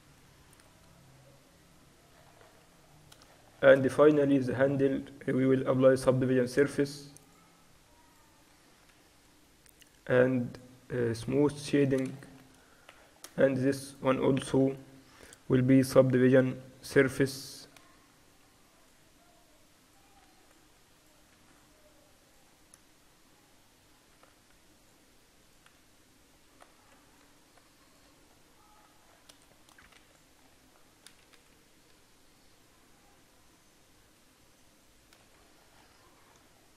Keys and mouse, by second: 0.1-2.8 middle drag, 4.4-6.3 middle drag, 5.9 ctrl+1, 7.3-12.4 drag, 9.0 t, 11.6 t, 12.4 middle click, 13.1 click, 13.4 middle click, 13.9 right click, 14.6 middle click, 15.2 right click, 15.9 ctrl+2, 16.8 Tab, 17.9 ctrl+r, 20.3 ctrl+r, 25.8 Tab, 27.1 ctrl+r, 28.1 Tab, 28.3-30.5 middle drag, 30.0 ctrl+s, 31.3-32.5 KP_6, 33.2 KP_6, 33.4-36.2 KP_6.